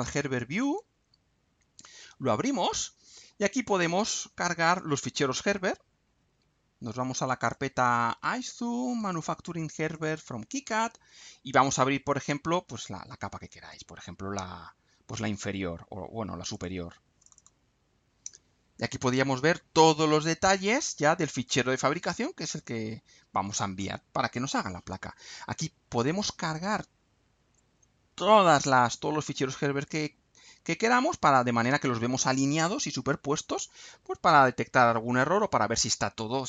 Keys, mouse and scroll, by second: 0.6 click, 3.5 click, 4.6 click, 7.4 click, 8.9 click, 9.9 click, 16.5 click, 17.2 click, 18.7 scroll up 2, 19.4 scroll up 2, 20.3 scroll up 2, 20.9 scroll down 2, 21.6-22.1 scroll up 2, 22.5 scroll down 2, 24.3 scroll down 2, 24.8 scroll up 2, 31.5 scroll down 2, 32.4 scroll up 2, 32.7 scroll down 2.